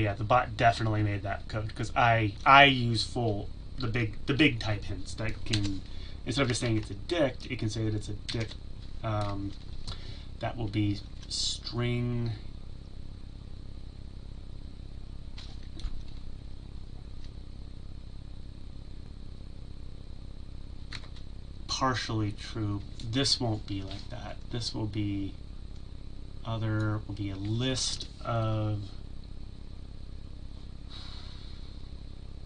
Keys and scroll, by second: 8.7 ctrl+z, 9.2 ctrl+…, 9.4 Tab.